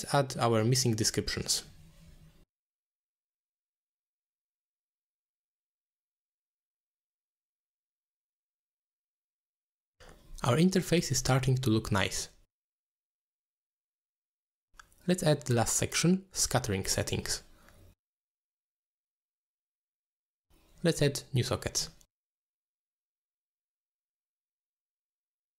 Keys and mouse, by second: 2.6-3.8 shift+drag, 2.9 t, 3.4 t, 4.0 click, 4.1 click, 4.3 shift+click, 5.4 click, 5.5-6.6 shift+drag, 6.4 t, 6.9 ctrl+click, 7.0 click, 8.0-9.1 shift+drag, 8.8 f, 9.3 click, 9.4 click, 9.6 click, 10.4 ctrl+click, 10.7-13.1 drag, 16.0 click, 17.3 ctrl+z, 17.7-18.2 drag, 18.7-21.9 shift+drag, 19.3 t, 21.4 t, 23.9 click, 24.3 shift+d.